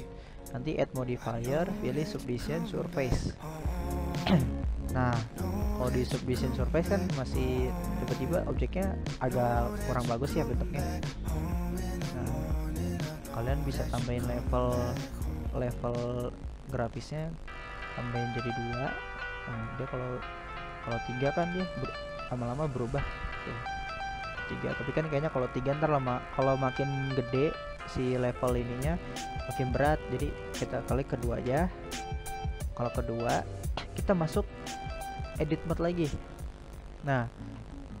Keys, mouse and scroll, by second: 0.2-0.6 scroll down 2, 0.6-1.0 scroll up 2, 1.0-8.4 middle drag, 8.4-11.2 drag, 12.1-15.1 drag, 16.6-28.2 drag, 28.7-29.7 middle drag, 29.7-30.7 scroll up 1, 30.7-32.9 drag, 32.9-37.6 middle drag, 37.6-38.0 scroll down 2.